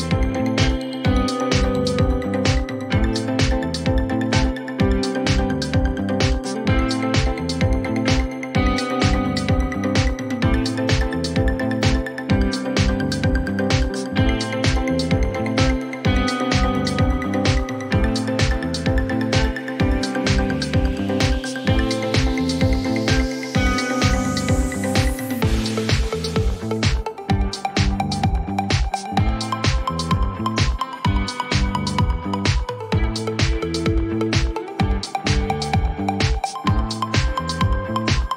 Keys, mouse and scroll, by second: 1.1-3.4 typing, 4.5 8, 6.4-8.5 drag, 9.5 ctrl+d, 10.8 p, 13.2 click, 13.3 click, 14.6 click, 15.8 click, 17.8 click, 18.9 ctrl+d, 20.7 p, 21.8 click, 23.4 click, 24.0-25.1 typing, 26.9 click, 27.1-27.9 typing, 28.8 Return, 29.1 click, 30.0 click, 31.9-33.1 drag, 34.9 c, 36.8-38.3 typing.